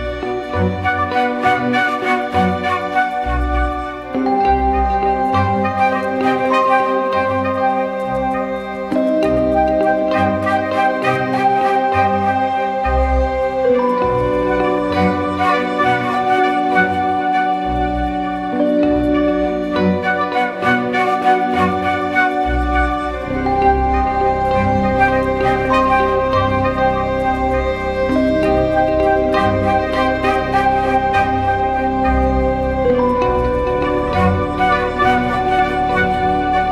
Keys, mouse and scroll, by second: 3.8 ctrl+t, 4.9 alt+shift+click, 6.6 alt+shift+click, 14.4 ctrl+-, 28.2 Return, 29.1 Left, 35.2 ctrl+=, 35.4 ctrl+=, 35.5 ctrl+=, 36.0-36.7 typing.